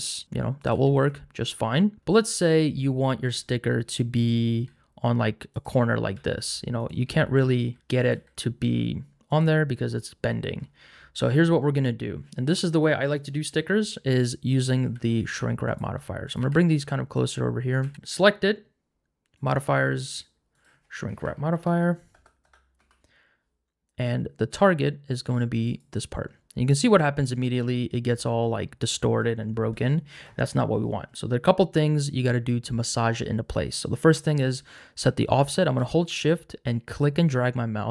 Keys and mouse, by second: 0.7 g, 0.9 z, 4.5 g, 6.1-8.1 typing, 8.0 click, 9.3 click, 14.8 g, 15.2 shift+z, 16.4 g, 16.7 shift+z, 17.1 click, 17.8 g, 17.9 shift+z, 19.3 click, 20.2-22.8 drag, 22.4 BackSpace, 25.7 click, 36.2-37.9 shift+drag.